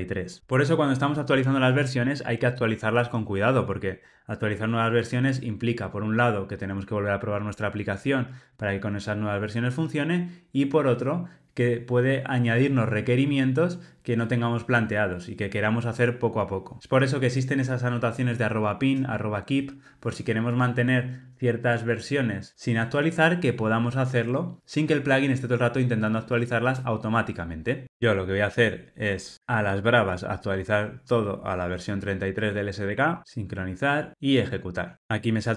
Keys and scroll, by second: 29.4 super+Down, 34.2 ctrl+r.